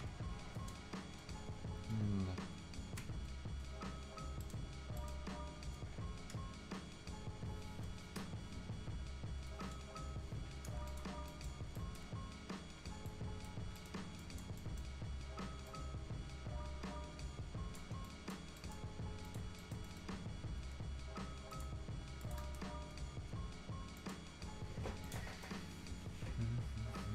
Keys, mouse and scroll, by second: 1.2 Return, 4.4 right click, 7.9 BackSpace, 10.0 Return, 10.9 click, 11.1-11.8 scroll down 2, 11.3 right click, 11.8 right click, 13.6-14.1 scroll up 2, 13.8 right click, 14.2 click, 14.6 right click, 14.9 scroll up 1, 15.7-18.1 drag, 18.6 right click, 18.8 scroll down 1, 19.0 scroll up 1, 19.1 scroll down 1, 19.2 click, 19.6 right click, 19.8 middle click, 19.9-20.3 scroll up 1, 21.5 click, 21.9 scroll down 1, 22.2 click, 22.4 right click, 22.6 scroll down 1, 24.0 click, 24.3 scroll down 1, 24.8 scroll up 1, 25.0-27.1 right drag.